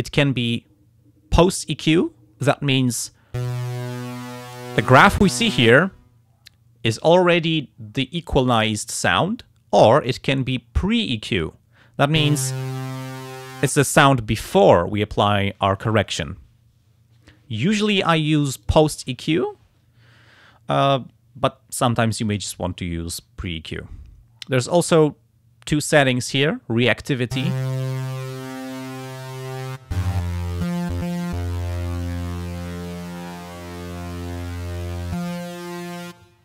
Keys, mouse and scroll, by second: 2.7 click, 10.1 click, 11.3 click, 17.5 click, 18.6 click, 28.3-29.8 drag, 32.1 click, 33.2-34.3 drag.